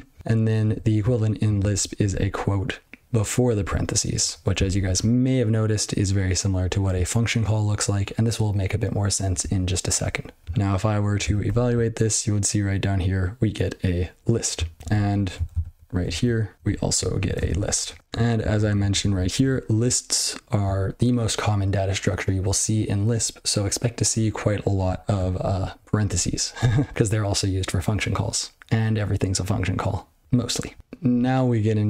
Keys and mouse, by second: 0.1 ctrl+n, 0.6 ctrl+e, 1.5 ctrl+a, 1.8 ctrl+f, 1.9 ctrl+f, 2.0 ctrl+f, 3.5 ctrl+f, 4.1 ctrl+b, 4.6 ctrl+alt+f, 11.4 ctrl+e, 14.8 ctrl+n, 14.9 ctrl+p, 15.1 ctrl+p, 16.5 ctrl+n, 16.6 ctrl+n, 16.7 ctrl+p, 16.9 ctrl+p, 17.2 ctrl+a, 17.3 ctrl+space, 17.4 ctrl+n, 17.7 ctrl+g, 17.9 ctrl+p, 18.3 ctrl+n, 18.5 ctrl+n, 18.7 ctrl+n, 18.9 ctrl+n, 19.1 ctrl+n, 19.3 ctrl+n, 19.3 ctrl+space, 25.4-25.7 ctrl+p, 26.0 ctrl+g, 26.4 ctrl+n.